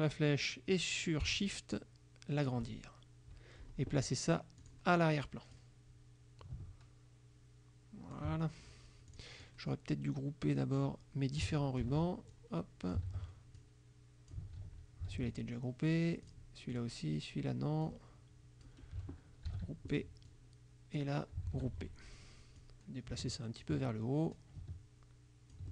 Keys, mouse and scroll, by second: 4.7 click, 5.6-8.4 drag, 9.2 click, 9.7-11.0 drag, 11.9 ctrl+g, 12.4 ctrl+click, 13.2 ctrl+g, 13.7 ctrl+click, 14.7 ctrl+g, 15.2 ctrl+z, 15.5 ctrl+click, 16.3 click, 16.8 click, 17.9 click, 19.5 ctrl+g, 20.0 ctrl+click, 20.3 ctrl+click, 21.5 ctrl+g, 22.6-23.9 drag, 24.4-25.7 drag.